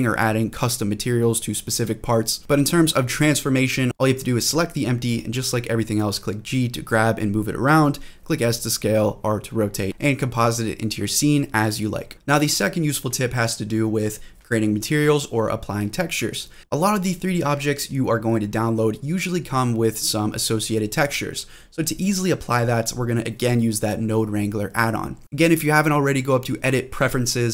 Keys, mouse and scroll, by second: 0.3 scroll up 1, 0.6 shift+middle drag, 1.1 g, 1.6 click, 1.9-2.3 middle drag, 2.5 g, 3.0 drag, 3.2 middle drag, 4.1 click, 4.8 g, 5.5 drag, 5.7 middle drag, 6.2 scroll down 2, 6.5-6.9 middle drag, 7.3-8.2 middle drag, 8.7 shift+middle drag, 9.4 g, 9.8 click, 10.2 middle click, 10.8 g, 12.0 click, 14.1 click, 15.1-16.7 drag, 17.2-18.4 scroll down 3, 18.4 middle click, 18.8-19.8 scroll down 1, 19.8 click, 19.8 scroll down 1, 20.2-20.9 scroll up 2, 20.5 middle click, 21.0-21.5 scroll up 2, 21.5-21.9 scroll down 2, 21.9 middle click, 22.3-22.7 scroll down 1, 22.7 middle click, 26.5-27.5 drag.